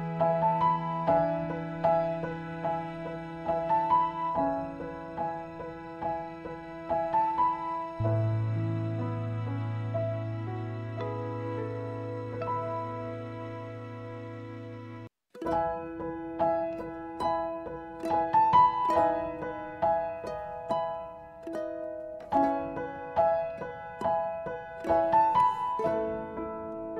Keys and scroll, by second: 4.0-6.0 typing, 10.3-11.0 typing.